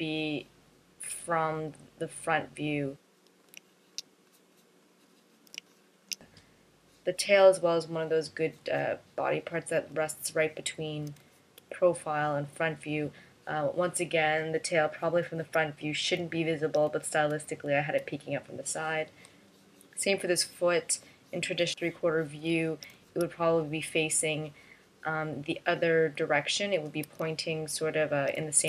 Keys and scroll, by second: 10.7 space, 12.0 space, 15.7 space, 17.3 space, 18.1 space, 23.4 space, 27.2 space.